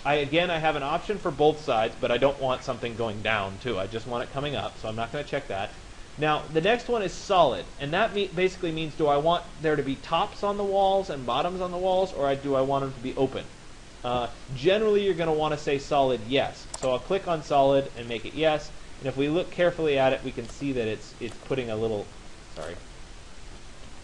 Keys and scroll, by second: 23.4 Escape.